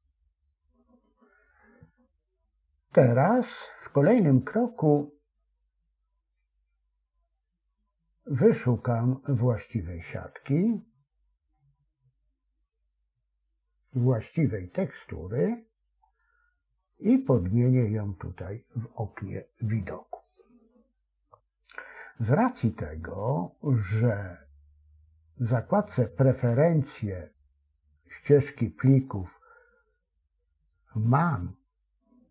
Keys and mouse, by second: 23.7-26.1 drag.